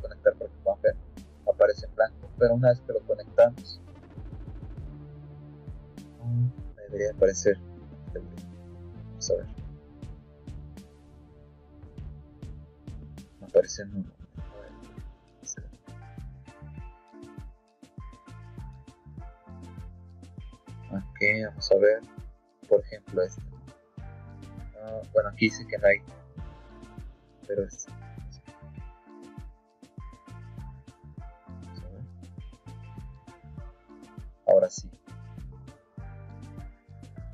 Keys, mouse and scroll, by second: 0.5 click, 1.9 click, 3.2 click, 3.8 click, 4.3 click, 5.5 scroll down 2, 6.0-6.5 scroll down 1, 7.7 click, 8.5 click, 9.3 click, 10.5 middle click, 11.6 click, 12.2 click, 13.1 click, 14.4 click, 15.1 click, 15.9 click, 16.5 click, 17.4 click, 17.8 click, 18.9 click, 19.6 middle click, 20.4 middle click, 22.1-24.0 drag, 24.7 click, 25.6 click, 27.6 click, 28.2 click, 29.2 click, 29.9 click, 32.0 click, 33.3 click, 35.1 click, 35.7-36.9 drag.